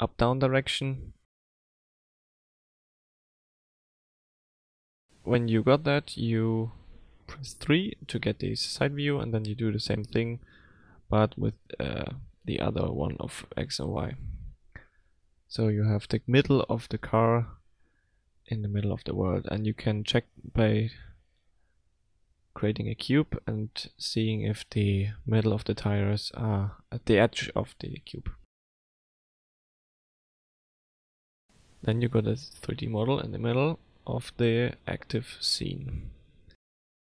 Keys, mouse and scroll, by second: 3.5-4.8 scroll down 5, 5.1 shift+middle click, 7.1 KP_3, 7.6 s, 8.4-9.3 scroll down 4, 9.3 g, 13.3-13.7 scroll up 5, 14.0 shift+middle click, 15.3-17.3 scroll up 1, 18.5 click, 19.5 F3, 22.6 s, 32.8 Delete, 34.9-35.3 scroll down 1, 35.3 middle click, 35.9 scroll down 3, 36.3 middle click.